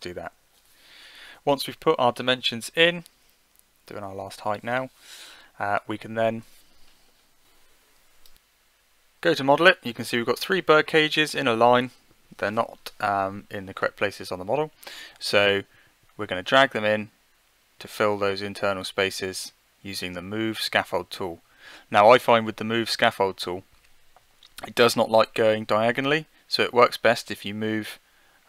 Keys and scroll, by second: 0.1 9, 3.7 1, 4.2 ., 4.8 8.